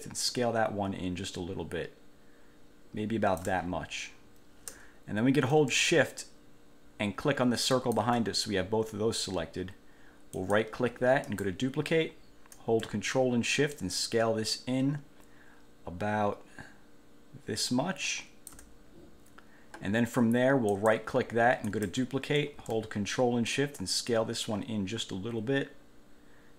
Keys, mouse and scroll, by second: 7.9 shift+click, 10.5 click, 11.4 click, 13.9-18.9 ctrl+shift+drag, 20.9 click, 21.9 click, 23.7-26.5 ctrl+shift+drag.